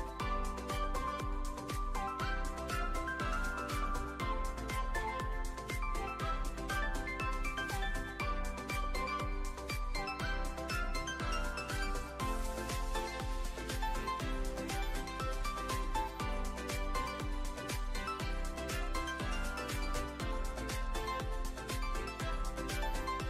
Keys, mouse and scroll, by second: 2.1-3.7 drag, 5.3 click, 7.4 click, 8.4 click, 10.1 s, 12.8 click, 13.7 a, 14.3 a, 14.7 middle click, 14.9 `, 16.2 e, 16.5 z, 17.5 click, 18.8 s, 19.2 0, 19.6 Return, 20.6 click, 22.1 shift+middle click, 23.0 ctrl+r.